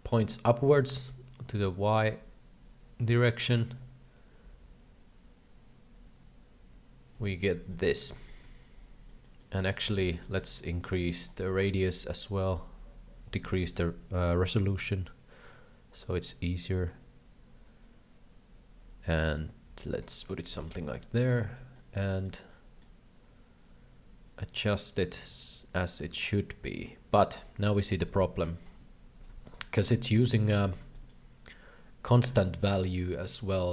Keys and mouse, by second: 0.9-7.1 shift+drag, 7.7 shift+middle click, 8.2 shift+middle click, 9.1 middle click, 9.5 middle click, 9.8 middle click, 10.5 middle click, 11.0 middle click, 11.5 shift+middle click, 13.3 click, 14.9-19.9 shift+drag, 20.3 shift+middle click, 20.6 shift+middle click, 20.9 shift+middle click, 21.2 shift+middle click, 21.5 shift+middle click, 21.9 shift+middle click, 22.2 shift+middle click, 22.5 shift+middle click, 23.6-27.3 shift+drag, 27.6 shift+middle click, 28.0 KP_3, 29.7 shift+middle click, 30.3 shift+middle click, 30.9 shift+middle click, 32.4 shift+middle click.